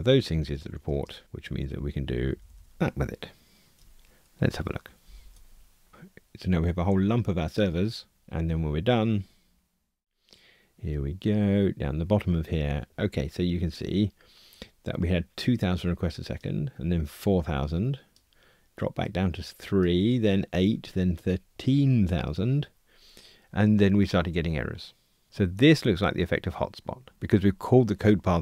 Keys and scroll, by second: 1.5 Delete, 5.0 ctrl+r.